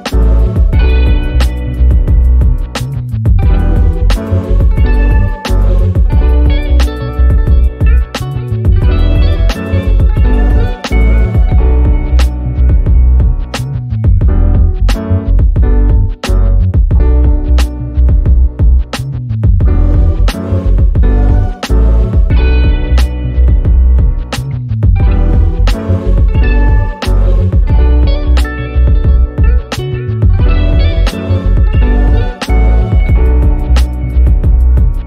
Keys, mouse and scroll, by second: 9.1 End, 11.0-11.7 ctrl+drag, 12.7 ctrl+scroll down 1, 13.1 ctrl+scroll up 1, 13.6-14.5 drag, 15.8-16.5 ctrl+shift+click, 16.7-17.1 ctrl+scroll up 2, 17.1-18.0 click, 18.1-18.6 ctrl+scroll down 2, 18.6 click, 19.1 z, 19.6-20.2 click, 20.3 F1, 22.5 p, 26.5-32.1 drag, 32.6 F1, 33.3 ctrl+l, 34.6-35.0 typing, 34.6 ctrl+scroll up 1.